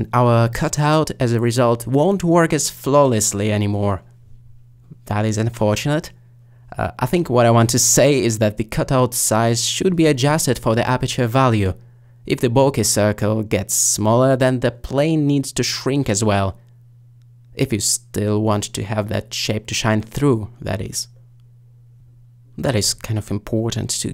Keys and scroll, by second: 13.0 s.